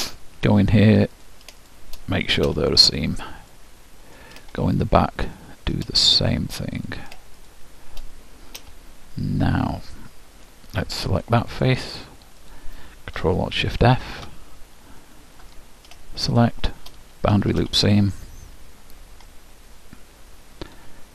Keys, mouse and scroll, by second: 1.3-3.5 drag, 3.1-6.9 middle drag, 6.9-9.5 drag, 9.8-11.6 middle drag, 11.6-14.3 drag, 15.1-16.3 ctrl+alt+shift+middle drag, 16.3-18.1 ctrl+alt+shift+drag, 17.5 shift+', 19.4-21.1 middle drag.